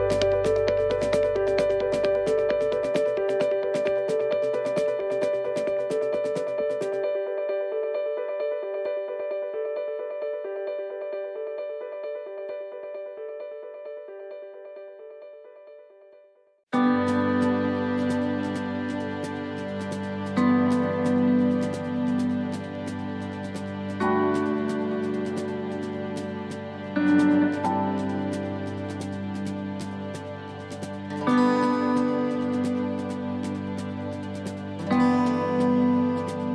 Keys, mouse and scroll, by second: 2.0 shift+middle click, 2.9 right click, 3.3 shift+right click, 3.7 shift+middle click, 4.3 middle click, 5.4 shift+right click, 6.2 shift+right click, 6.8 s, 9.6 middle click, 10.3 scroll down 1, 10.7 middle click, 11.5 shift+middle click, 12.0-12.3 scroll up 2, 12.3 middle click, 13.2 right click, 13.7 middle click, 14.5 shift+right click, 14.8 right click, 15.2 middle click, 16.3 click, 18.5 middle click, 20.1-20.6 scroll up 3, 20.9 right click, 21.2 shift+right click, 21.7 right click, 22.0 middle click, 23.0 click, 24.6 middle click, 25.3-25.7 scroll down 2, 25.7 middle click, 26.0-26.4 scroll down 1, 26.4 middle click, 26.8-27.2 scroll down 1, 27.3 middle click, 27.7 scroll up 2, 28.9 middle click, 30.0 shift+middle click, 30.5 scroll up 1, 31.8 right click, 33.2 click, 35.8 right click.